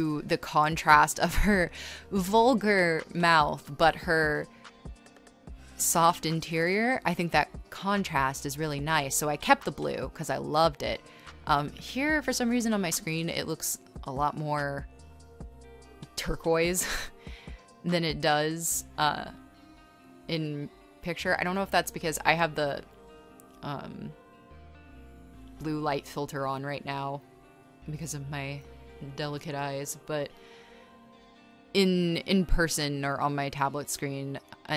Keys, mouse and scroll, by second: 1.9-6.1 typing, 10.6 space, 11.1 e, 11.9 space, 13.6 space, 14.3 space, 16.8-18.9 typing, 21.9-24.0 typing, 27.3 space, 28.0 scroll, 28.5 space, 28.6 scroll, 29.6 space, 30.0 space, 31.0 r, 31.2 scroll, 32.7 e, 33.0 b, 33.9 r.